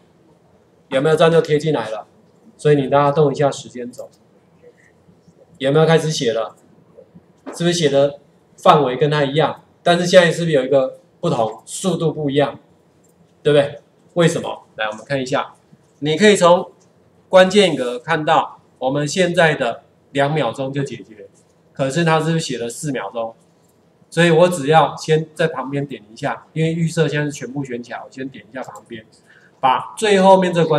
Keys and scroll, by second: 17.0 ctrl+4.